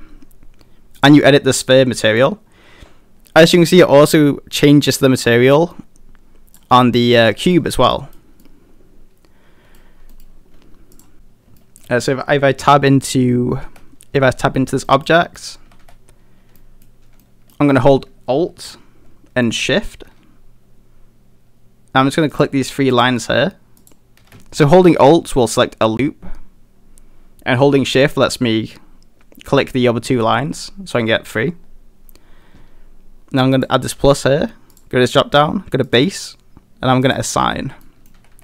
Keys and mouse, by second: 1.0 click, 7.3 middle drag, 7.9 middle drag, 8.4-9.8 middle drag, 10.1 middle click, 11.6 shift+middle drag, 13.6 Tab, 14.9 middle click, 15.4 middle click, 15.7 a, 15.8 a, 16.6 middle click, 17.2 middle click, 22.3 alt+shift+click, 33.6 click, 34.9-36.0 drag, 37.0 click, 37.8 middle click, 38.2 a, 38.3 a.